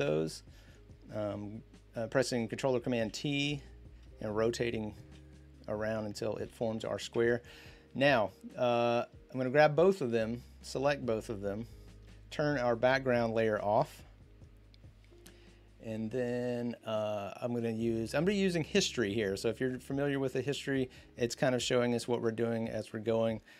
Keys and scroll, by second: 2.8 ctrl+t, 6.9 Return.